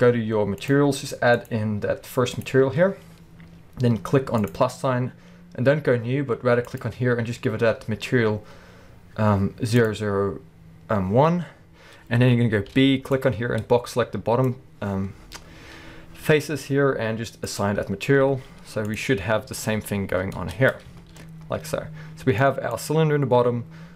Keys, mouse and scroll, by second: 0.6 click, 1.3-4.6 drag, 6.7-17.8 drag, 11.6 scroll up 1, 12.7 b, 15.8-17.5 scroll up 1, 18.3 z, 19.3 scroll down 1, 19.4 alt+a, 20.0-20.4 scroll down 1, 20.4 Tab, 20.7-21.0 scroll up 1, 21.0 alt+a, 21.7-22.7 middle drag, 22.7 click.